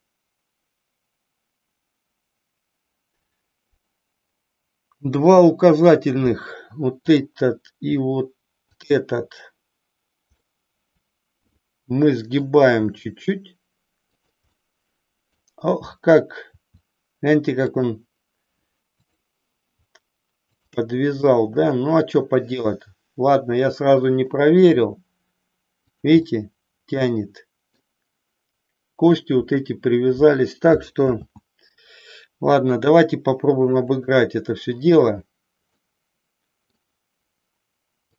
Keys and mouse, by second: 7.0-8.2 drag, 8.8-9.9 shift+drag, 10.4-12.4 middle drag, 12.8 r, 14.3 click, 14.5 middle click, 16.5 r, 17.8 click, 19.0-20.0 drag, 20.5-22.0 shift+drag, 22.0-24.4 middle drag, 24.6 r, 26.4-27.8 middle drag, 31.2 ctrl+z, 34.0 click, 35.8-36.8 middle drag.